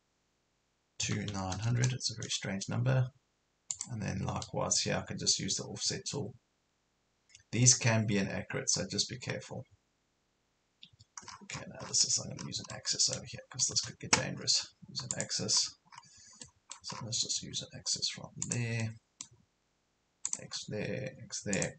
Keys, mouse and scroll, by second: 1.0 KP_2, 1.3 KP_9, 3.7 click, 11.3 scroll down 1, 11.9 Escape, 12.5 scroll down 1, 12.7-14.2 middle drag, 15.1 click, 15.5 scroll up 1, 17.0-17.6 scroll down 1, 18.4 click, 18.8 middle click, 20.3 click.